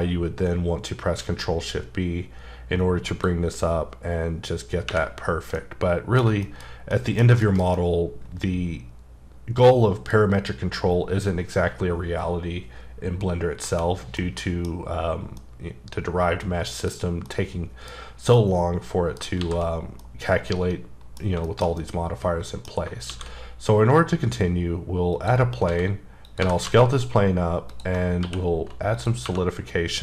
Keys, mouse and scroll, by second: 3.1 click, 5.1-5.6 scroll down 4, 5.6 middle click, 6.4 shift+middle click, 14.2 middle click, 15.4 middle click, 17.2 middle click, 18.1 scroll down 1, 18.3 middle click, 19.4 shift+c, 20.0 middle click, 21.2 scroll down 1, 21.5 middle click, 21.8 double middle click, 23.1 shift+a, 25.1 click, 25.7 s, 26.2 click, 26.4 g, 26.6 z, 27.7 click, 28.0 scroll up 3, 28.2 q, 28.9 click, 29.2 2.